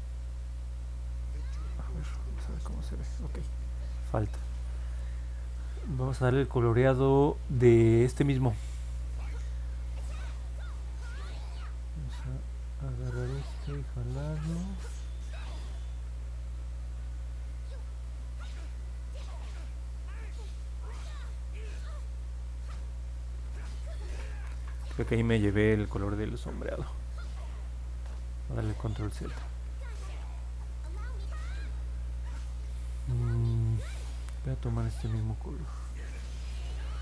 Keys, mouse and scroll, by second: 0.3 click, 1.8-2.3 scroll down 2, 3.0-3.5 scroll up 2, 3.5 scroll down 1, 4.2 scroll down 1, 13.1 click, 14.9 click, 15.3 click, 16.3 click, 19.0 click, 19.8 click, 20.4 click, 27.6 ctrl+z, 27.9 ctrl+z, 28.4 ctrl+z, 28.7 ctrl+z, 29.0 ctrl+z, 29.2 ctrl+z, 29.6 ctrl+z, 29.9 ctrl+z, 30.2 ctrl+z.